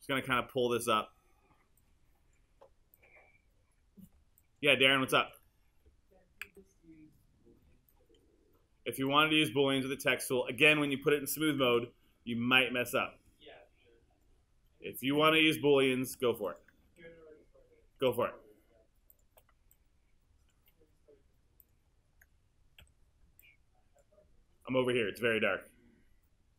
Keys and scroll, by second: 6.5 super+z, 11.6 super+z, 18.0 q, 22.8 w.